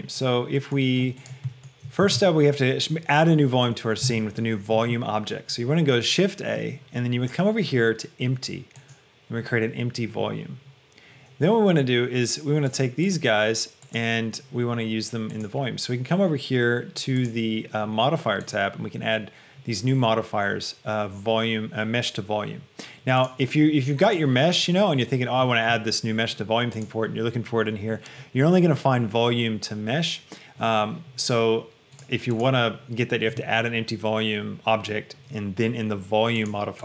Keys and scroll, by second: 2.3 shift+a.